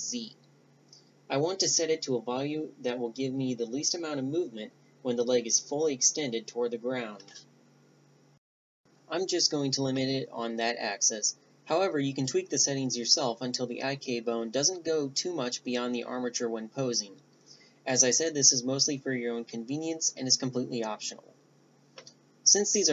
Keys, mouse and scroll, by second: 1.5-5.8 drag, 16.9 g, 22.7-22.9 drag.